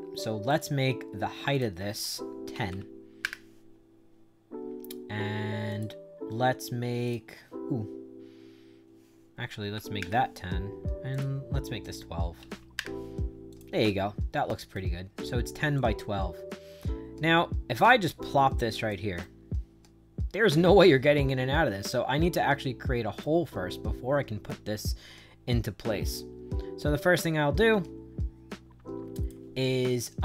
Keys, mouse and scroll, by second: 0.4 click, 1.4 click, 2.2-3.1 typing, 3.1 Return, 4.3 middle click, 5.6 click, 6.9 click, 9.1-10.1 typing, 11.0 click, 11.7 click, 12.0-12.9 typing, 13.4 click, 13.7 right click, 15.1 click, 15.7-18.8 drag, 19.1-23.1 right drag, 23.6-29.2 drag.